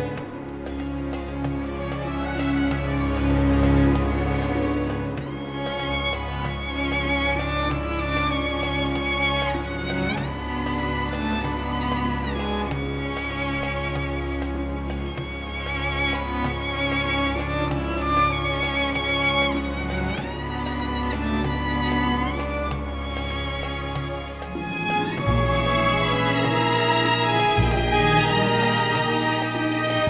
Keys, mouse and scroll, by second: 1.4 click, 2.6 click, 4.5 scroll up 2, 5.1-5.6 scroll down 2, 7.7 scroll up 2, 10.5 click, 10.9 Escape, 14.7 click, 15.6 click, 17.7 click, 20.3 6, 21.9 click, 23.8 click, 24.7 click, 26.9 click, 29.0 6, 29.6 click.